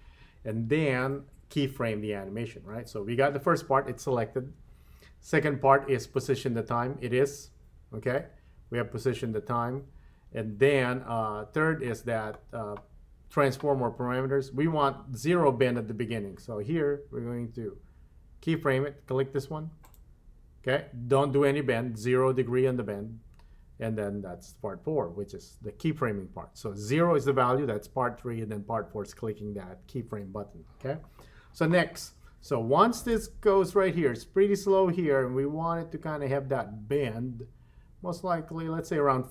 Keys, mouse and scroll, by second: 19.9 click, 33.2-39.3 drag.